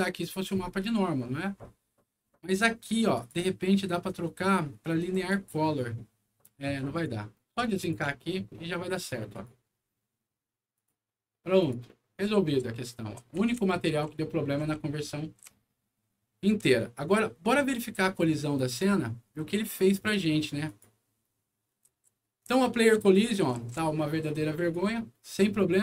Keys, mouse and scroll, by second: 2.4 click, 3.1 click, 5.0 click, 6.7 click, 7.7 alt+click, 8.9 alt+click, 9.3 alt+click, 10.7 alt+click, 11.5 click, 12.1-17.6 right drag, 12.5-17.1 typing, 18.6 click, 20.6 click, 21.6-23.5 typing, 21.7-24.6 right drag.